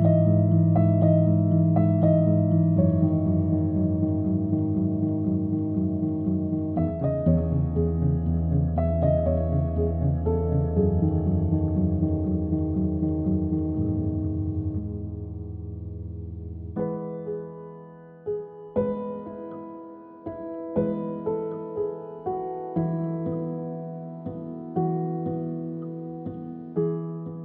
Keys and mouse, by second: 0.2 KP_1, 1.0 click, 1.4 KP_3, 1.9 shift+d, 2.4 s, 2.9 g, 4.2-6.7 typing, 8.5-10.5 typing, 12.0 s, 12.9 s, 13.5 g, 14.6 click, 14.7 Tab, 15.1 click, 15.3 g, 17.5 Tab, 17.6 click, 17.8 middle click, 18.3 KP_3, 19.5 alt+middle click, 20.2 KP_1, 20.6 Tab, 20.9 click, 21.0 g, 24.2 g, 24.6 click, 24.7 g, 25.1 g, 25.7 ctrl+z, 25.8 ctrl+z, 25.9 ctrl+z, 26.1 ctrl+z, 26.2 ctrl+z, 26.6 click, 26.7 g.